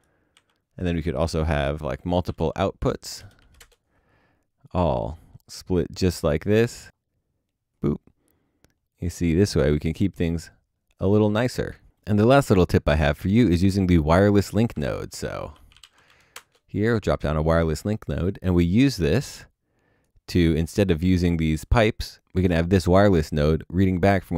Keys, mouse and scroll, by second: 0.3 Delete, 1.4 ctrl+space, 2.1-2.9 typing, 3.6 Return, 14.8 ctrl+space, 15.4-16.3 typing.